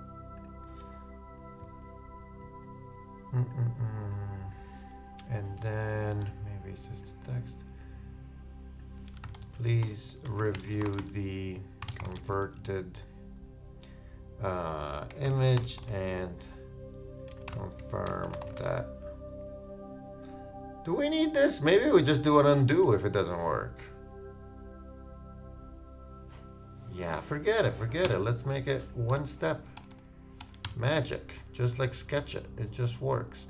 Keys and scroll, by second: 9.1 shift+Return, 9.2 shift+p, 30.5 shift+BackSpace, 30.6 shift+i.